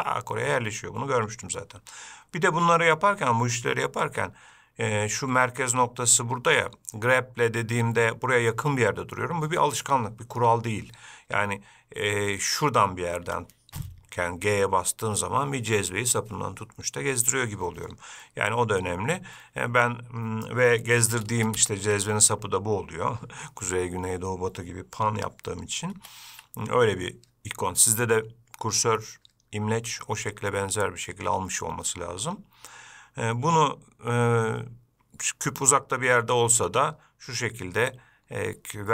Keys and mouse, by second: 13.4 g.